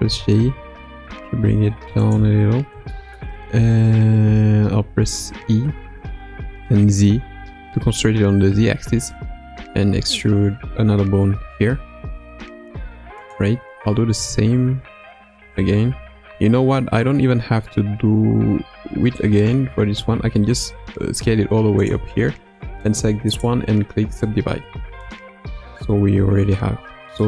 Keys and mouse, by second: 3.0 shift+middle click, 5.3 e, 14.1 e, 23.4-25.1 right drag, 27.1-27.2 middle drag.